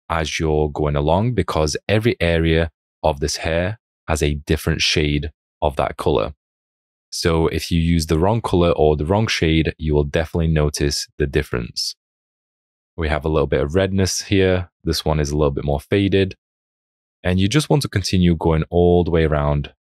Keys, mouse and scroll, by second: 2.7 alt+click, 8.2 alt+click, 11.5 alt+click, 13.0 alt+click, 18.0 alt+click.